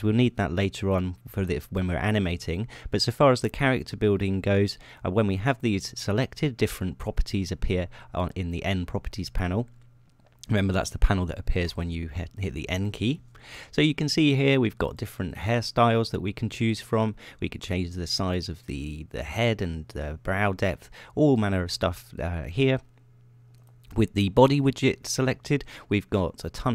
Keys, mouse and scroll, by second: 12.9 n, 16.0 click, 16.4 click, 19.1 click, 20.1 click, 21.8 click, 24.9 click, 26.3 click.